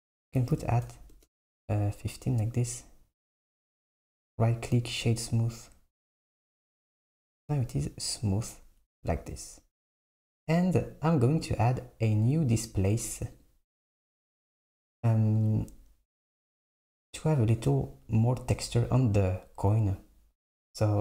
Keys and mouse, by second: 4.0-7.1 right drag, 13.4-15.5 drag, 16.7-19.8 drag.